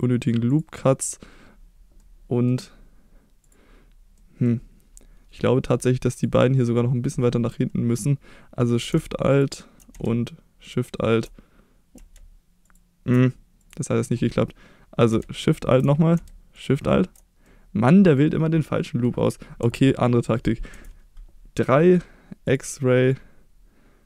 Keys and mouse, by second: 0.5 click, 0.7 middle click, 2.1 middle click, 4.2 middle click, 6.1 click, 13.6 click, 17.4-18.1 middle drag, 18.8 middle drag, 19.6 KP_1, 20.7 KP_3, 22.4 click, 23.1-24.0 drag.